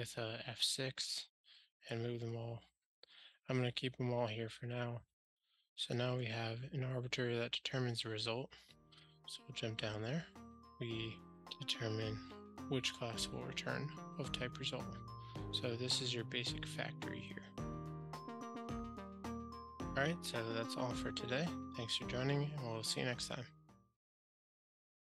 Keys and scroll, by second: 9.8 super+b.